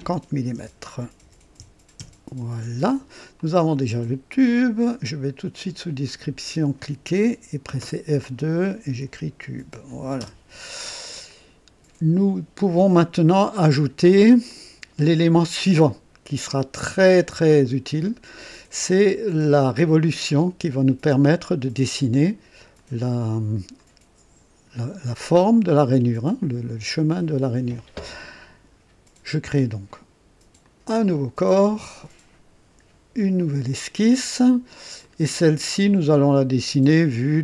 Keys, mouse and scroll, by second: 0.6-2.1 typing, 2.0 Return, 3.4 click, 6.0 click, 7.7 F2, 8.6-11.8 typing, 11.3 click, 13.0-14.4 drag, 14.5-18.5 drag, 18.3-19.0 typing, 18.9 click, 19.4-20.5 drag, 21.2-22.0 typing, 21.5 click, 22.8 click, 23.8-24.9 drag, 26.3-27.5 drag, 28.0 typing, 30.6 click, 33.4 click, 35.0-36.1 drag, 37.3 click.